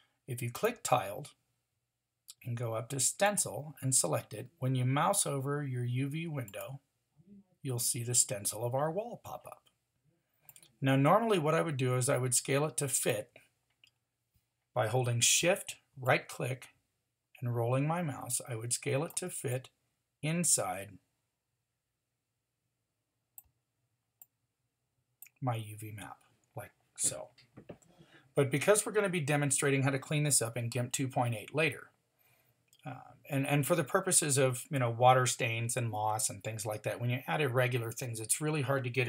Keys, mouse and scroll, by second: 10.4-14.9 drag, 16.0-25.0 drag.